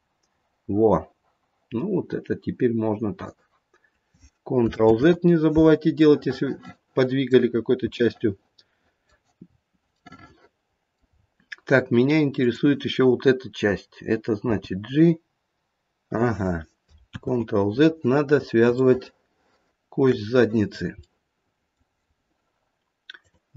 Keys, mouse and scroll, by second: 4.9 ctrl+z, 6.0 middle click, 6.3 middle click, 6.9 middle click, 7.4-7.9 scroll down 4, 7.9 middle click, 9.4-10.0 scroll up 1, 10.0 middle click, 10.0-10.8 scroll up 3, 10.8 middle click, 11.0-12.3 scroll down 1, 12.3 click, 12.3-12.9 scroll down 2, 14.4 g, 17.1 ctrl+z, 18.3-19.0 scroll up 5, 19.0 shift+middle click, 19.6 shift+middle click, 20.7-21.4 scroll down 3, 21.0 middle click, 23.1 click.